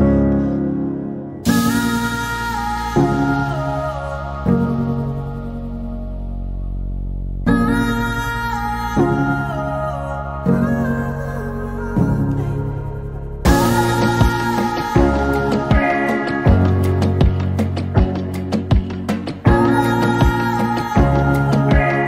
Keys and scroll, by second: 2.0 r, 3.7 r, 6.6 space, 12.6-14.3 typing, 21.1 m.